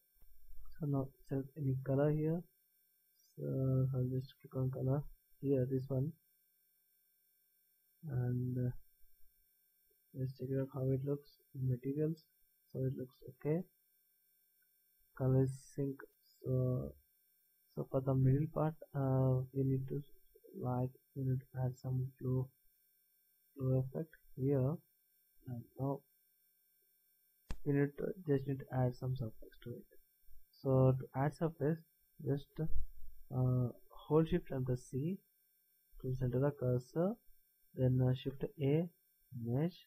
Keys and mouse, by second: 0.8-2.7 drag, 10.6 z, 15.9 middle click, 16.4-17.5 middle drag, 18.0-19.1 middle drag, 21.7-22.7 drag, 25.4-34.9 middle drag, 34.9 shift+c, 38.6 shift+a.